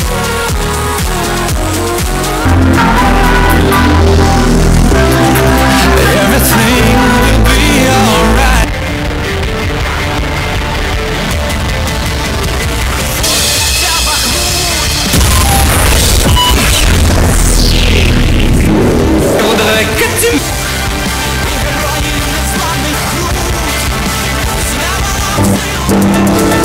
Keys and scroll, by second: 8.6 Page_Down, 20.3 Page_Down.